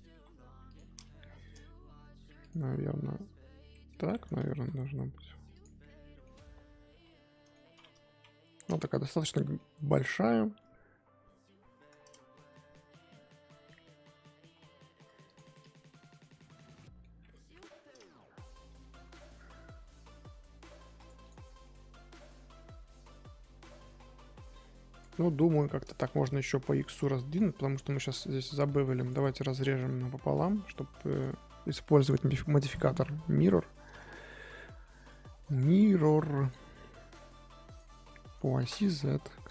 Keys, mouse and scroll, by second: 0.1 s, 2.8 scroll down 1, 3.0 middle click, 4.0 Tab, 5.8-7.6 middle drag, 7.6-8.1 scroll up 1, 8.1 KP_3, 8.9 z, 9.4 shift+middle click, 9.7-10.5 scroll up 2, 15.9-16.2 middle drag, 16.2 z, 16.8-17.4 middle drag, 17.4 KP_3, 18.7 g, 21.2 click, 21.4 scroll down 3, 21.6-24.6 middle drag, 24.6 scroll up 1, 24.9 click, 25.1-25.5 middle drag, 25.5 scroll up 1, 27.8 click, 28.8 ctrl+r, 29.5 z, 29.7 middle click, 30.0 1, 30.4 middle click, 30.7 click, 33.2-34.2 middle drag, 34.2 z, 34.6-37.7 middle drag, 37.7 click, 38.2 click, 38.5 click, 38.7 click, 39.4 click.